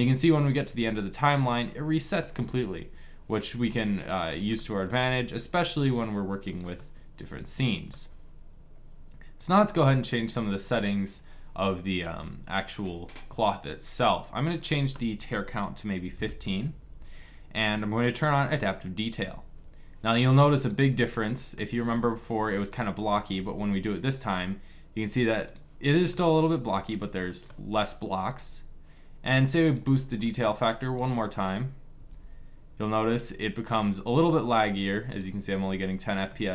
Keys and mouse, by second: 1.3-4.0 middle drag, 2.1 g, 4.2 middle click, 4.7 g, 6.8-7.8 drag, 9.2-11.2 middle drag, 14.5-16.6 drag, 19.7-21.2 drag, 22.5 middle click, 23.0 g, 25.8 click, 26.5 middle click, 28.2-29.4 right drag, 29.4 middle click, 30.0-32.9 drag, 30.8 right click, 31.8 g, 36.1 middle click.